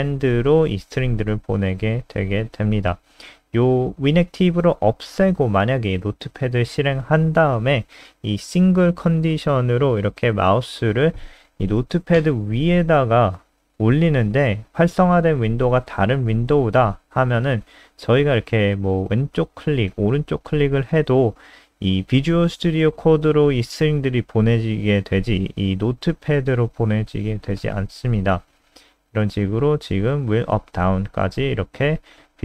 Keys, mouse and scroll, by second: 0.2 Left, 0.4 shift+End, 0.7 shift+Left, 2.2 ctrl+x, 3.9 F5, 5.4 super+n, 10.6 click.